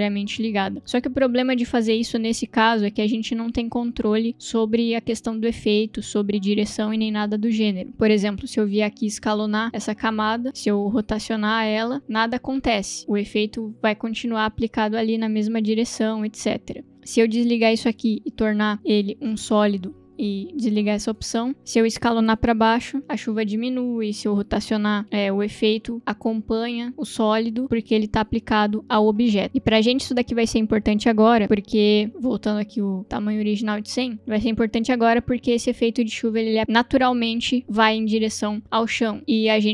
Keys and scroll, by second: 8.4 s, 10.8 r, 16.0 ctrl+z, 22.6 s, 24.9 p, 29.4 ctrl+z, 31.4 s, 33.0 0, 33.5 Return, 36.4 space.